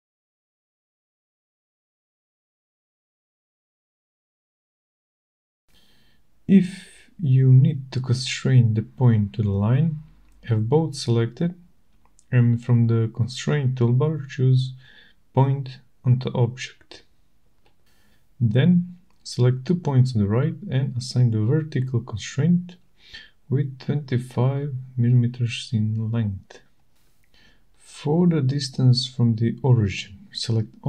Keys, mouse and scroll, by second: 0.3 click, 1.1 click, 1.8 click, 3.3 click, 5.2 click, 5.8 right click, 7.1 right click, 9.1 click, 9.9 click, 13.5 click, 17.4 click, 19.2 click, 20.9 click, 23.1-24.0 typing, 26.9 click, 28.0-28.7 typing.